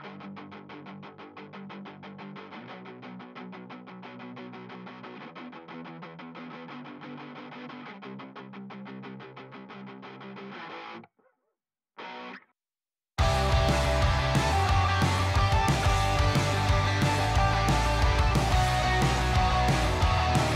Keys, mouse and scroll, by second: 0.2-4.8 typing, 0.6 middle click, 1.9 click, 2.7 click, 3.7 click, 4.4 click, 5.3 click, 6.3-8.2 typing, 6.7 click, 7.7 click, 8.7 click, 9.0 shift+click, 9.4 ctrl+r, 9.7 click, 10.3 typing, 10.9 click, 11.4 typing, 12.0 click, 13.1-14.2 typing, 13.3 click, 13.5 middle click, 13.9 click, 15.2 click, 15.3 click, 15.4 middle click, 15.6 click, 15.8 middle click, 16.1 shift+click, 16.4 KP_1, 16.5 ctrl+b, 17.0-17.4 scroll up 1, 17.8 click, 18.2 middle click, 19.1 2, 19.7 3, 19.7 click, 20.0 ctrl+b, 20.4 click.